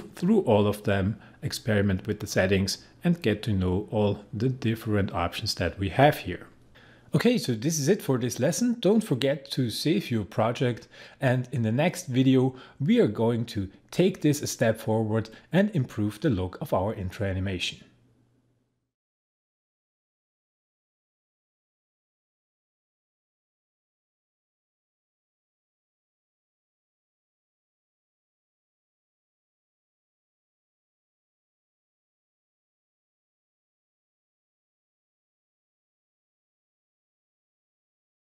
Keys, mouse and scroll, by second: 6.6 click.